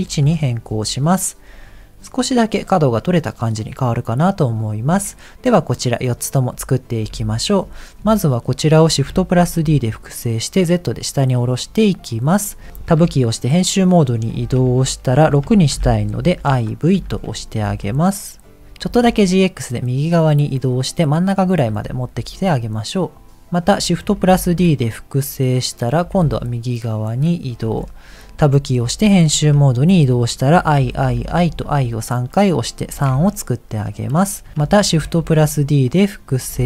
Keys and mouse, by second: 2.1 click, 7.1 KP_1, 8.2 shift+middle click, 9.1 shift+d, 13.0 Tab, 14.5 BackSpace, 14.5 BackSpace, 15.7 shift+i, 16.1 shift+v, 16.9 Tab, 17.6 g, 18.8 g, 24.2 shift+d, 26.0 g, 28.5 Tab, 29.2 BackSpace, 29.4 BackSpace, 30.5 shift+i, 30.9 shift+i, 31.5 Tab, 32.9 g, 34.8 shift+d.